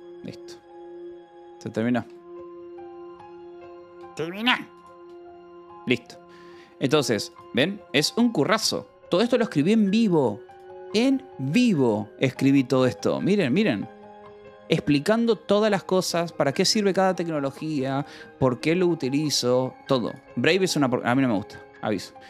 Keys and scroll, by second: 5.2 Escape, 5.5 Return, 9.9-11.0 typing, 12.3 Escape, 13.2 o, 13.5 Return, 14.8 space, 16.1 space, 17.1-20.2 typing.